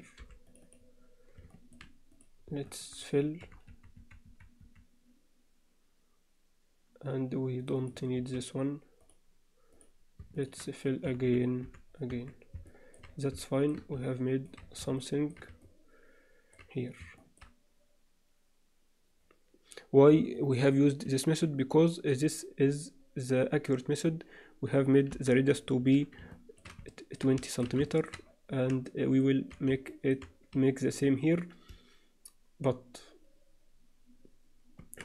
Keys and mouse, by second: 1.5 alt+shift+middle click, 2.1 click, 3.4-4.6 typing, 7.8 click, 8.1 x, 9.7 click, 10.3 shift+click, 11.1 f, 11.3 f, 11.6 f, 12.1 Tab, 12.7 alt+middle click, 13.4-13.7 shift+middle drag, 14.1-14.5 alt+middle drag, 15.0-15.3 shift+middle drag, 15.6-16.5 middle drag, 17.2 shift+middle click, 20.3-21.0 alt+middle drag, 25.1 KP_7, 26.3 alt+shift+middle click, 26.9 ctrl+alt+middle drag, 27.4 shift+middle click, 27.9 ctrl+alt+middle click, 28.9-29.2 alt+shift+middle drag, 29.9 shift+middle click, 34.8 Tab.